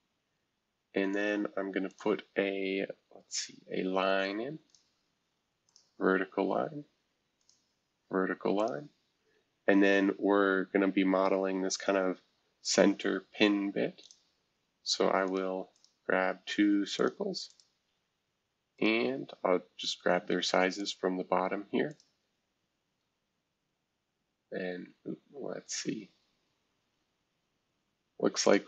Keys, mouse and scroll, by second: 1.9 click, 4.7 click, 5.6 click, 7.4 click, 8.5 click, 9.2 Escape, 9.6 scroll down 2, 10.4-11.4 scroll down 1, 11.4-12.0 scroll down 1, 12.2-13.8 scroll up 1, 14.0 click, 15.2 click, 15.7 click, 16.9 click, 17.5 click, 17.9 Escape, 18.7 click, 19.1-20.2 scroll down 1, 20.2-20.8 shift+scroll up 1, 20.8 shift+click, 21.1 e, 21.9 click, 22.3-23.2 scroll down 1, 24.5-25.2 scroll up 1, 25.2-25.5 scroll up 1, 25.5-26.1 scroll down 1, 26.1-27.2 scroll down 1, 28.4 shift+click.